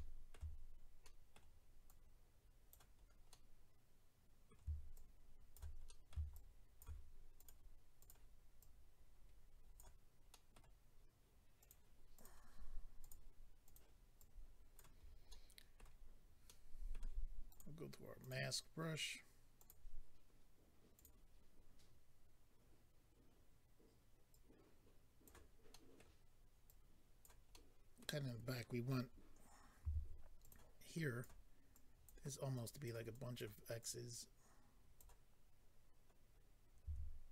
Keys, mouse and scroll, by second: 0.3 middle click, 1.0 middle click, 1.8 click, 3.0-3.3 scroll down 1, 3.3 middle click, 4.9 shift+click, 5.8 middle click, 6.3 shift+click, 7.4 click, 7.5 click, 8.0 click, 8.1 click, 8.6 click, 10.3 middle click, 11.6 click, 11.7 click, 12.1 click, 12.2 double click, 13.0 double click, 13.1 double click, 13.6 double click, 14.2 click, 15.0 scroll down 2, 15.3 middle click, 16.1 middle click, 16.1 scroll down 2, 16.5 middle click, 17.5 click, 18.2 click, 19.6 click, 19.6 click, 20.9 click, 21.0 click, 24.3 click, 25.7 middle click, 26.7 click, 27.5 middle click, 30.4 click, 30.4 f, 30.5 click, 30.9 click, 31.7 click, 32.5 click, 33.1 click, 33.8 click, 34.1 click, 36.3 scroll, 36.3 scroll up 2.